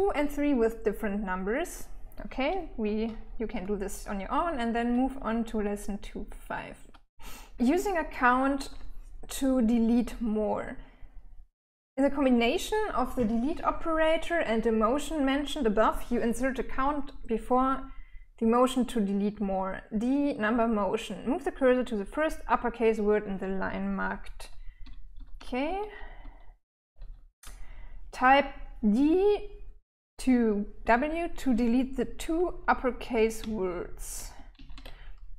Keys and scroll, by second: 4.2-6.3 typing, 24.2-26.3 typing, 32.8-34.1 typing.